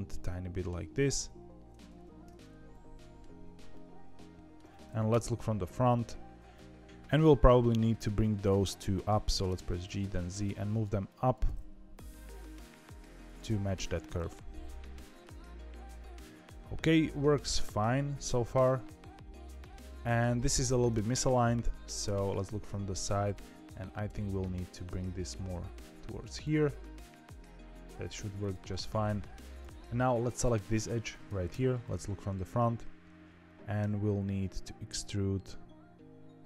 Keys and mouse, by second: 0.0 middle click, 0.9 g, 2.3 middle click, 3.7 middle click, 5.0 KP_1, 6.5 click, 8.0 click, 9.3 g, 11.0 click, 11.4 g, 14.0-15.2 middle drag, 15.5-17.6 middle drag, 18.5 KP_1, 19.7 KP_7, 22.0 KP_3, 22.9 click, 24.0 g, 29.5 click, 31.4 KP_1, 33.7 e.